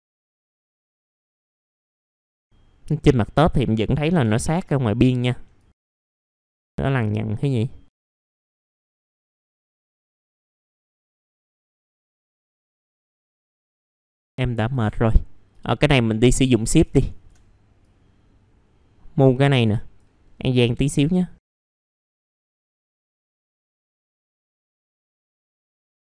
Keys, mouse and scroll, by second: 0.2 middle click, 1.2 scroll down 1, 1.6 middle click, 1.7-2.3 scroll up 2, 1.9 click, 2.0 alt+middle click, 2.3 alt+middle click, 5.2 scroll down 1, 5.5 click, 5.7 middle click, 5.8 scroll down 1, 6.1 click, 6.3-6.7 scroll up 1, 6.7 middle click, 8.6 scroll down 1, 9.1-9.4 scroll up 2, 9.4 click, 9.5 scroll down 1, 11.0 right click, 11.3 click, 11.4 right click, 11.6 click, 12.1 alt+middle click, 12.2 middle click, 12.5 click, 12.9 alt+middle click, 13.1 alt+middle click, 13.6 alt+middle click, 14.0 middle click, 14.6 click, 16.2 scroll up 1, 16.5 ctrl+click, 17.0 shift+click, 17.8-20.3 drag, 20.3 scroll up 1, 21.0 click, 21.5 scroll down 1, 21.7 scroll up 1, 21.9 click, 22.2 click, 22.5 scroll down 1, 22.6 alt+middle click, 22.9 middle click, 23.4 middle click, 23.5 scroll up 1, 23.6 middle click, 23.7 scroll down 1, 24.6 alt+middle click, 24.8 scroll down 1, 24.9 middle click, 25.3 middle click, 25.4 scroll up 1, 25.7 right click, 25.8 click.